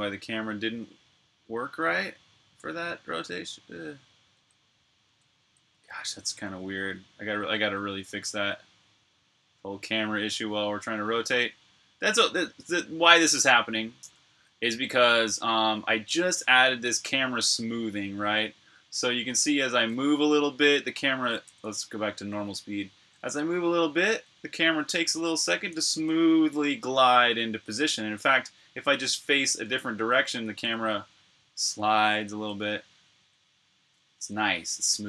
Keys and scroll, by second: 4.2-6.6 typing, 7.6 typing, 10.0 c, 14.1 c, 18.6-27.7 typing, 29.5 l, 30.4 h, 32.2-35.0 typing.